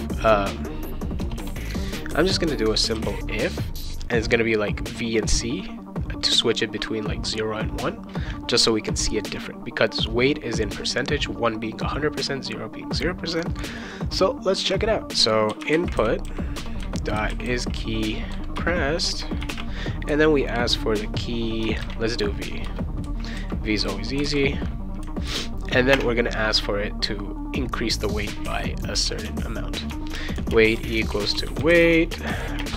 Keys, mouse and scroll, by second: 0.0-1.4 typing, 2.6-3.4 typing, 15.2-18.1 typing, 18.6 Return, 19.1-20.0 typing, 21.8 shift+v, 22.6 Return, 24.2 shift+[, 24.3 shift+], 25.9 space, 28.4-32.7 typing, 29.9 Return.